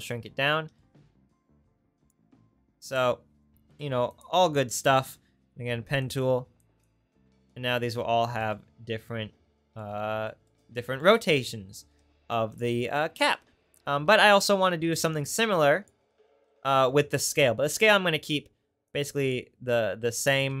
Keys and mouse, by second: 2.1-12.7 drag, 3.8 Delete, 13.0 click, 15.1-20.6 drag.